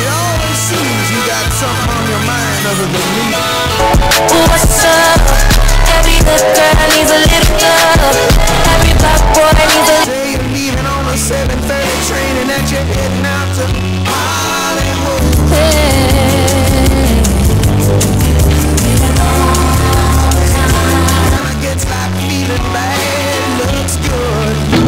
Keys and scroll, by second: 10.0 Page_Down, 21.4 Page_Down.